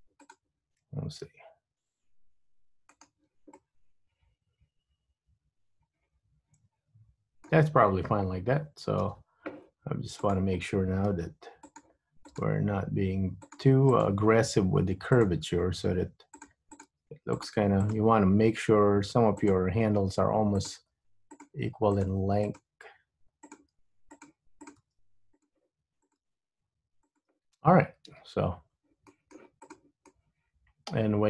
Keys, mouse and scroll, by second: 0.3 click, 1.5 g, 3.7 middle click, 9.2 KP_3, 10.3 click, 11.2 g, 12.5 click, 12.6 g, 14.0 click, 14.3 g, 15.6 g, 16.9 click, 17.0 g, 18.0 click, 18.1 g, 20.7 click, 21.0 g, 22.1 click, 22.3 g, 23.7 click, 23.8 g, 24.8 click, 24.9 g, 26.2 click, 26.3 g, 28.2 Tab, 28.6 scroll down 2, 29.3 middle click, 29.7 click, 30.1 middle click.